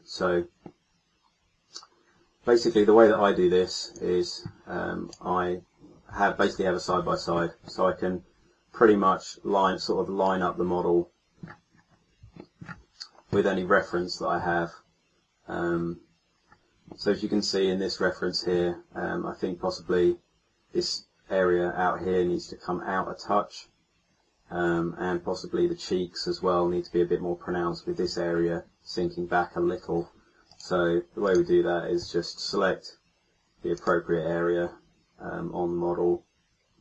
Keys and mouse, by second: 6.2-7.8 middle drag, 8.1 middle click, 11.8 middle click, 15.7-17.0 middle drag.